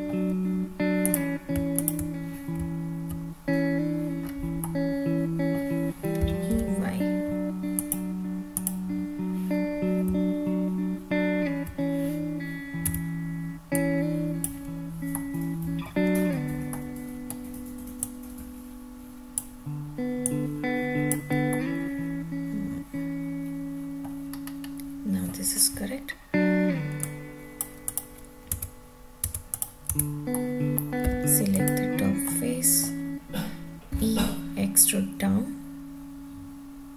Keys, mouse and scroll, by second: 1.0 click, 1.7 shift+click, 2.5 `, 4.2-4.6 scroll down 1, 4.6 middle click, 6.2 e, 6.5 y, 7.7 click, 8.5 click, 10.0 `, 12.9 Tab, 13.7-14.4 drag, 15.1-15.8 middle drag, 16.2 scroll down 1, 16.8-17.3 middle drag, 18.0-19.3 drag, 20.2-21.1 drag, 21.5-24.0 middle drag, 24.5-25.5 scroll up 2, 25.5 scroll down 1, 27.0-27.5 drag, 27.9 click, 28.5 Tab, 29.3 Tab, 29.5 click, 29.9 Tab, 30.3-30.7 middle drag, 31.0 3, 31.5 click, 32.2-32.9 middle drag, 33.9 e.